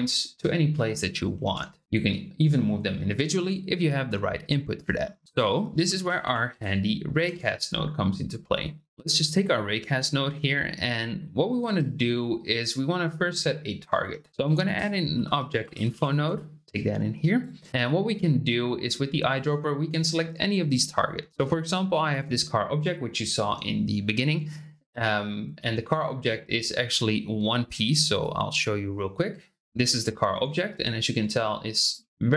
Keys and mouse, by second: 1.5 ctrl+z, 5.2 shift+a, 10.1-11.4 shift+drag, 14.1 shift+middle click, 14.3 shift+a, 16.6 click, 28.2 click, 30.0 shift+drag, 30.1 shift+middle drag, 30.8 shift+middle click, 31.7 click.